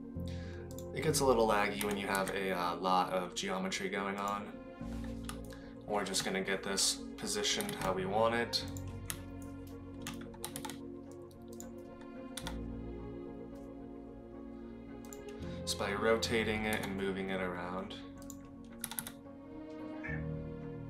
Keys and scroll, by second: 1.8 g, 7.6 g, 10.4 g, 12.7 r, 16.7 g, 19.1 r.